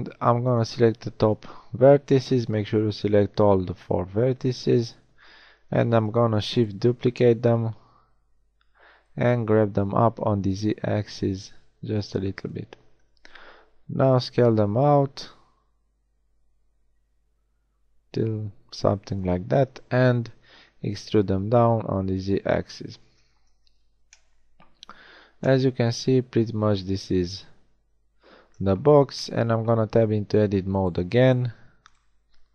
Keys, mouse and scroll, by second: 0.5 b, 4.6 KP_1, 6.1 shift+d, 14.1 s, 20.5 e, 23.1 z, 23.9 Tab, 29.8 Tab.